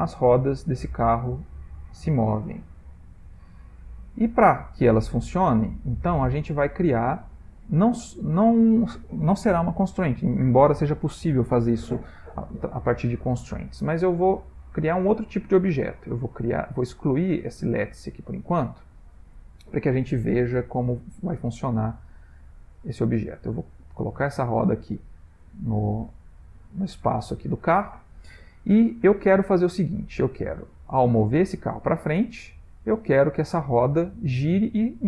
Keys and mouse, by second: 6.6 ctrl+middle click, 7.2 shift+middle click, 15.5 click, 17.3 x, 18.8 shift+middle click, 19.4 middle click, 20.6 shift+middle click, 22.1 click, 23.2 click, 25.0 middle click, 27.7 middle click, 30.5 click, 31.6 click, 33.7 click.